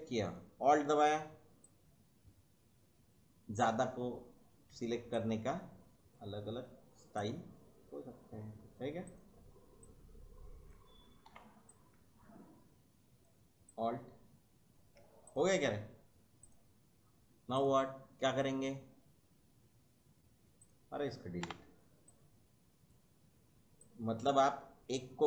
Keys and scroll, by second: 11.3 Delete, 21.4 Delete.